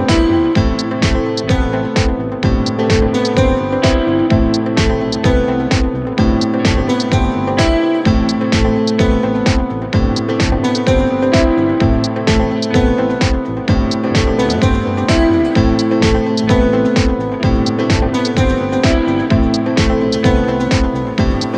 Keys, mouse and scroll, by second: 14.4 Return, 16.2 Return, 17.2 ctrl+t, 21.4 Return.